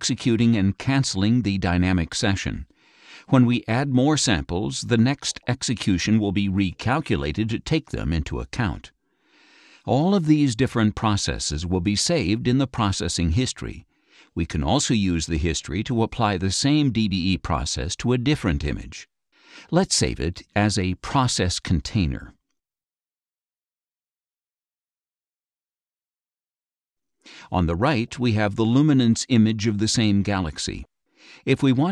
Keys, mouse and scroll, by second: 20.4-23.9 drag, 25.1-26.8 drag, 27.8 click, 29.8 click, 31.5-31.9 drag.